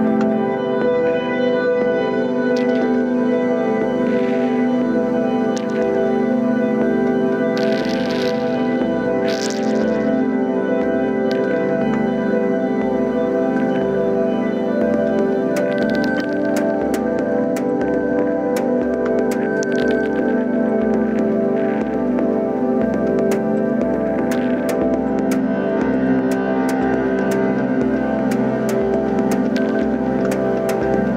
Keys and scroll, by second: 5.9 ctrl+d, 18.6 ctrl+d.